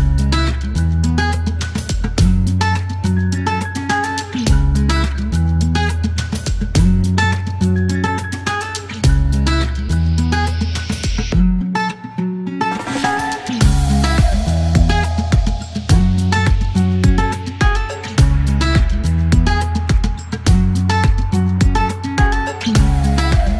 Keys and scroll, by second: 1.5 alt+e, 3.8 space, 7.6 alt+m, 7.7 z, 9.1 alt+e, 13.0 KP_9, 14.5 alt+m, 14.6-16.4 typing, 16.3 alt+m, 19.2 KP_0, 21.2 F2, 22.2 e, 22.7 shift+s.